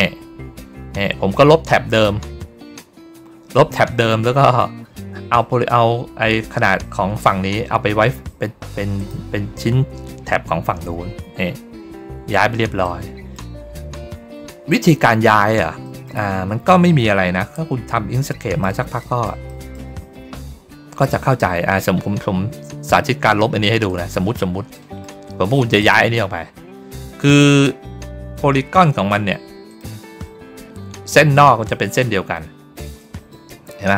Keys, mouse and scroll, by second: 0.1 ctrl+middle click, 8.9 click, 12.7 middle click, 14.6 middle click, 15.7 middle click, 16.3-17.0 ctrl+scroll down 1, 17.6 ctrl+middle click, 18.2 middle click, 18.9 middle click, 19.4 middle click, 20.8-21.9 ctrl+middle drag, 24.2 ctrl+middle click, 24.6 middle click, 25.7 click, 27.2 ctrl+click, 29.6 click, 30.5 ctrl+middle click, 32.4 ctrl+middle click, 32.9 middle click, 33.5 ctrl+middle click.